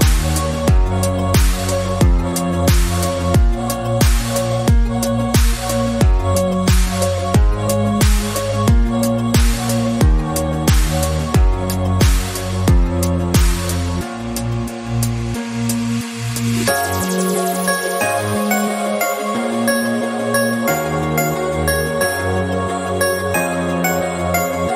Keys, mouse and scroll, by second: 0.1 e, 1.6 click, 2.0 scroll up 1, 2.4 scroll down 2, 2.5-4.1 middle drag, 4.1 ctrl+z, 4.6 e, 7.4 alt+click, 7.8 middle click, 8.7 Tab, 9.1 ctrl+s, 10.8 shift+a, 11.7 ctrl+a, 12.6 Tab, 13.3 ctrl+b, 15.5-22.1 drag, 22.1 Tab, 22.3 scroll down 6, 22.5 middle click, 23.2 scroll up 7, 23.6 middle click, 24.2 right click.